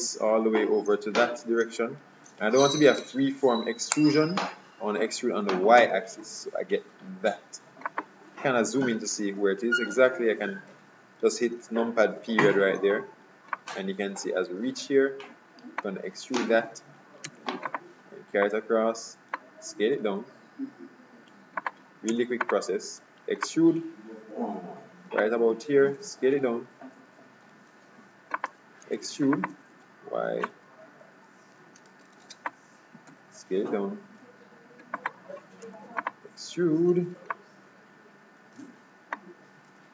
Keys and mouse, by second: 8.8 KP_Decimal, 12.1 middle click, 12.4-13.7 middle drag, 13.7-15.4 drag, 17.3 e, 18.5-20.4 drag, 20.1 s, 22.2 e, 23.6-25.2 drag, 26.1 s, 29.0 e, 30.6-32.3 drag, 33.2 s, 35.7 e, 37.4-39.2 drag, 39.8 s.